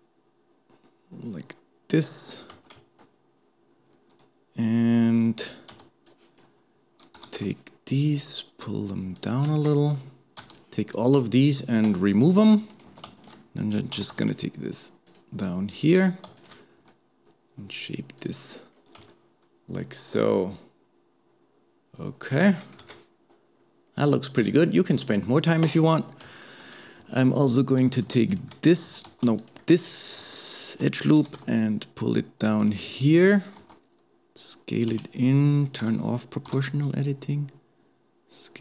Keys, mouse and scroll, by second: 9.5 alt+a, 10.4 b, 13.2 alt+shift+click, 14.0 g, 16.4 alt+shift+click, 16.8 s, 18.7-19.1 scroll down 1, 19.1-22.8 shift+middle drag, 22.8 KP_1, 23.5-23.9 scroll down 2, 23.9-24.6 scroll up 1, 24.6 shift+middle click, 25.1-25.6 scroll up 2, 25.6 alt+a, 26.0-26.4 scroll up 1, 26.4 shift+middle click, 27.0 alt+a, 27.5 alt+click, 29.1 alt+a, 30.4 alt+shift+click, 31.2 g, 33.6 s, 35.8 o.